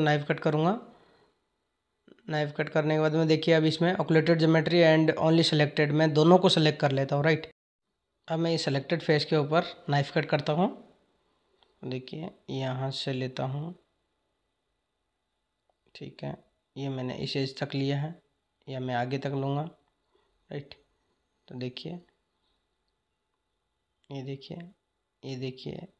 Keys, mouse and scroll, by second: 0.1-5.7 drag, 7.6 click, 14.3-17.4 drag.